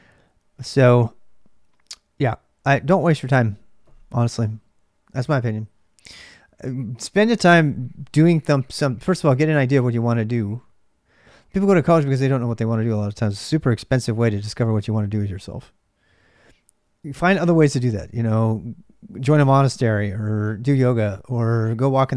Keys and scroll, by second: 0.0-22.1 typing.